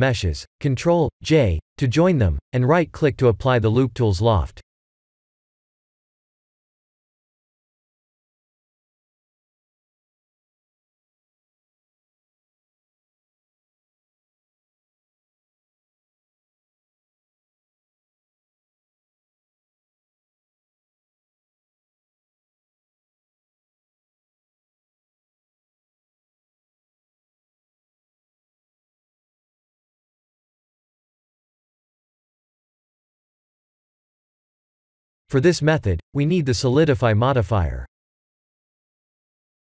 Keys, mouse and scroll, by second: 0.0 middle click, 1.8 click, 3.6 scroll down 1, 4.5 click, 5.2 shift+click, 7.1-8.0 scroll down 5, 8.1 shift+middle click, 9.5 middle click, 12.1 shift+click, 12.8 scroll down 5, 14.6 1, 16.1 ctrl+j, 16.9 Tab, 18.6 a, 22.3 right click, 26.2 middle click, 28.5-29.1 scroll up 5, 29.6 Tab, 30.4 click, 31.5 right click, 32.5 scroll up 4, 32.8 middle click, 36.8 click.